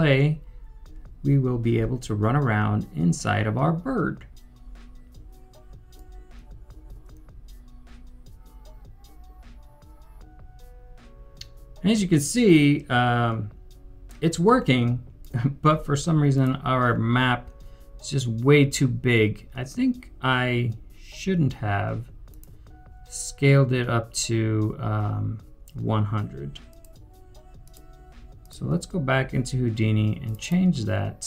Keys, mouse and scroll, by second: 5.9 right click, 6.0-7.6 typing, 9.9 typing, 21.1-21.9 typing, 30.4 typing, 30.4 double click.